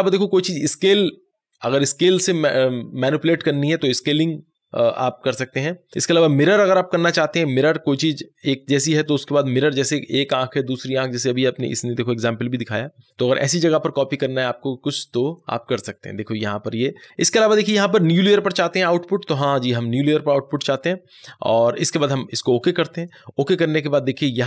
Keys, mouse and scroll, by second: 3.4 click, 3.4 click, 5.9 click, 17.0-17.8 scroll down 1, 22.9 click.